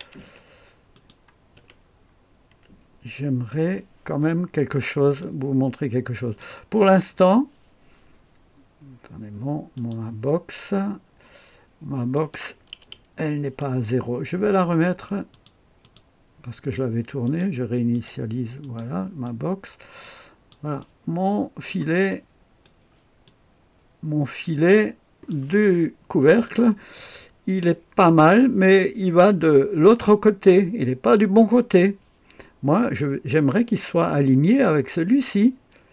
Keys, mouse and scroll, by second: 0.0-0.2 typing, 0.9 click, 1.5 click, 1.6-2.5 typing, 5.2-6.4 drag, 6.6-9.4 scroll down 1, 9.8 click, 12.1 click, 15.3 click, 15.8 click, 17.2 click, 17.9 click, 18.6 click, 19.3-20.5 drag, 20.8 click, 22.1 right click, 23.3-25.3 drag.